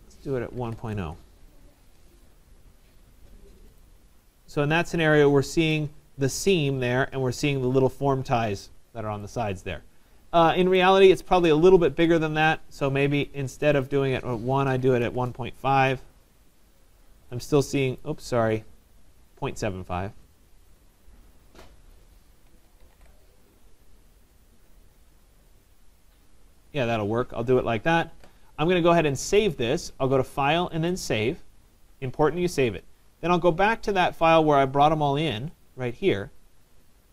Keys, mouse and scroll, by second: 0.4-1.5 typing, 1.5 Return, 3.3 middle click, 3.4 middle click, 3.8 click, 5.8 right click, 10.9 right click, 11.5 scroll, 12.5 middle click, 12.5 click, 13.9 click, 14.5-16.1 typing, 16.6 click, 16.9 middle click, 16.9 middle click, 17.0 middle click, 18.1 right click, 18.7-19.4 typing, 19.0 middle click, 19.1 middle click, 20.3 click, 22.0 click, 22.2-23.4 typing, 24.4 click, 25.1 middle click, 25.1 middle click, 27.9 right click, 29.4 click, 30.9 click, 33.9 click, 35.7 click.